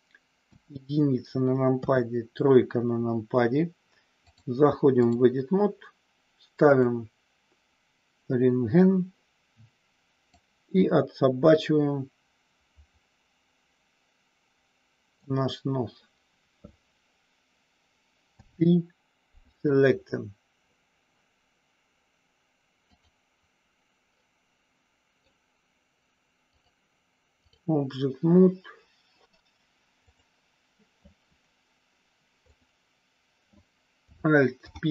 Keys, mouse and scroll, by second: 0.4 KP_1, 1.8 KP_3, 4.3-5.3 drag, 6.6 click, 10.3-15.1 drag, 18.4 p, 23.1 click, 24.3 middle click, 26.6 click, 30.0 click, 32.5 click, 34.5 alt+p.